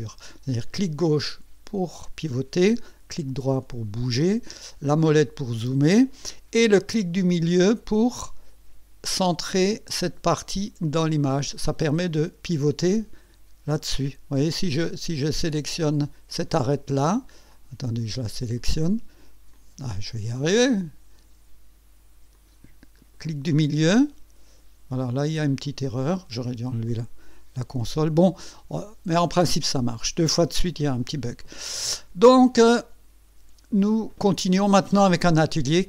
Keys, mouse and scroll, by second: 0.1 click, 0.6-2.7 drag, 2.8-4.4 right drag, 4.5 right click, 4.8-5.1 scroll up 1, 5.1-5.5 scroll down 1, 10.2 middle click, 11.2-13.2 drag, 16.5 click, 17.5 click, 18.6 click, 19.5 click, 20.5 click, 22.3 click, 23.0 middle click, 25.6 click, 26.9 click, 27.2 click, 28.4 click, 29.2 right click, 31.4 click, 32.2-34.5 drag.